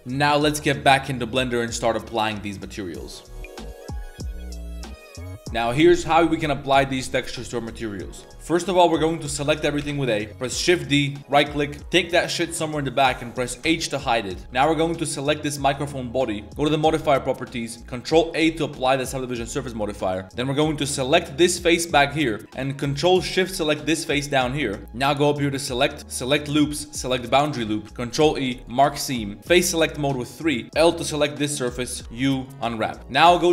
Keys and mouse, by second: 0.0 a, 0.3-3.2 middle drag, 0.3 a, 6.7 middle drag, 8.4 ctrl+s, 9.0 a, 9.2 a, 9.3 a, 9.8 a, 10.1 middle click, 11.2 shift+d, 11.8 ctrl+x, 12.2 ctrl+middle click, 13.3 click, 13.3 middle click, 13.6 h, 15.1 g, 16.9 click, 17.8 click, 18.5 ctrl+a, 19.4-19.7 middle drag, 19.7 Tab, 20.0 middle click, 20.6 3, 21.4 click, 23.8 ctrl+shift+click, 24.3 middle click, 24.8 shift+middle click, 25.3-27.6 drag, 27.8 ctrl+e, 29.0 middle click, 29.4 3, 30.0 click, 30.9 l, 32.0 u.